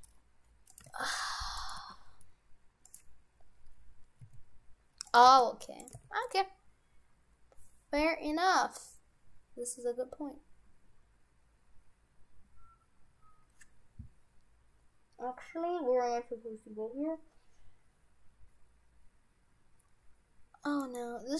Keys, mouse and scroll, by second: 0.9 g, 1.8 g, 3.5-4.2 scroll up 3, 4.2 s, 5.3 g, 6.0 g, 21.2-21.3 scroll down 3.